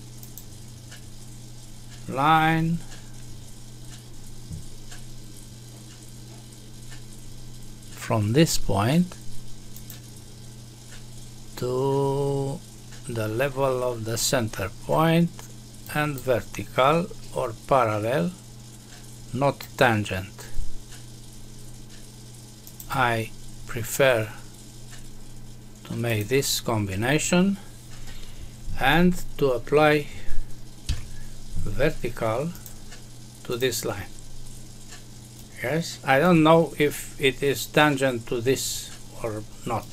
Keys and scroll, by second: 30.8 Escape.